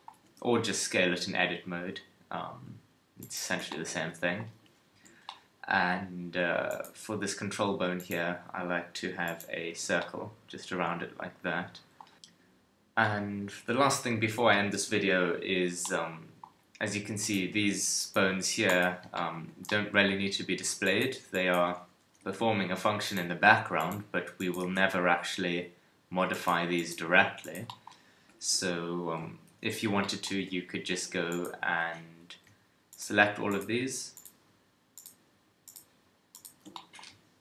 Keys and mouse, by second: 0.1 Tab, 0.6 s, 3.2 click, 3.5 Tab, 4.5 KP_1, 4.9 a, 9.8 a, 17.4 KP_3, 21.8 KP_3, 22.2 g, 23.2 r, 24.6 g, 27.0 r, 28.2 a, 28.4 a, 29.5 alt+r, 29.7 alt+g, 30.4 Tab, 30.9 Tab.